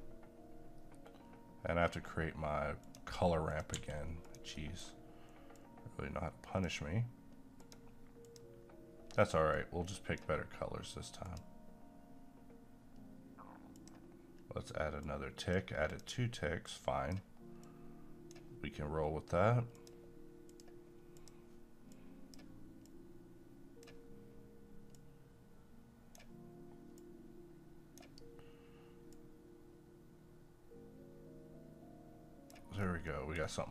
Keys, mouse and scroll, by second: 2.8 click, 3.7 g, 4.2 click, 4.6 middle click, 5.5-19.7 drag, 22.2-32.8 drag, 32.8-33.1 scroll down 1, 33.1 middle click, 33.4 scroll down 1.